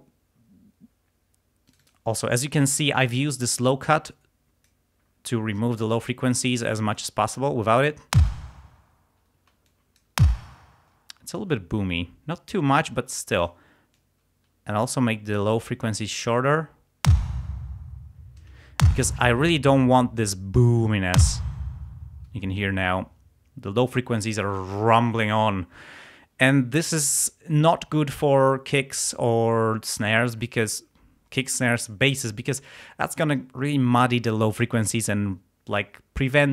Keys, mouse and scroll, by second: 1.7 click, 4.1 click, 5.6 click, 8.2 space, 9.4 space, 9.7 middle click, 10.3 space, 11.0 space, 13.1 click, 14.0-15.6 drag, 17.1 space, 18.9 space, 21.2 space, 21.9 space.